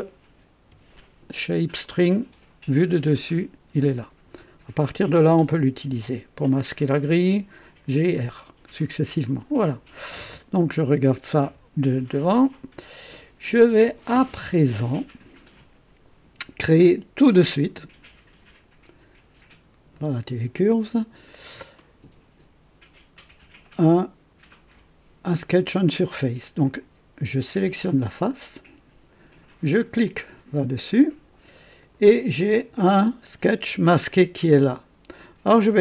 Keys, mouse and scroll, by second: 0.6 KP_2, 1.8 right click, 2.4 scroll up 1, 7.6-8.6 typing, 11.4 KP_1, 12.1-13.0 right drag, 17.4 click, 19.9 click, 21.2 click, 26.6 click, 27.5 click, 29.8 click, 31.8 click.